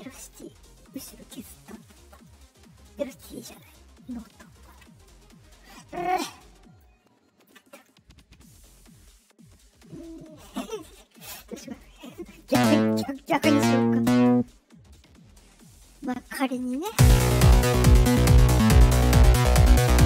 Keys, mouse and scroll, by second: 0.9-4.6 drag, 6.7 click, 8.4-8.7 scroll up 1, 10.5 click, 11.4 ctrl+z, 11.6 right click, 12.3 click, 13.2 click, 14.6 middle click, 14.6-15.3 scroll up 2, 15.1 middle click, 16.8 space.